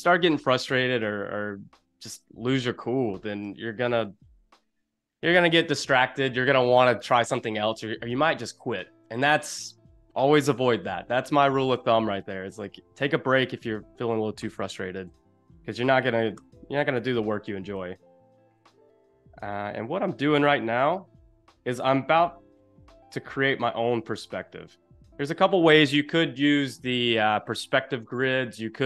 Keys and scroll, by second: 15.1 e.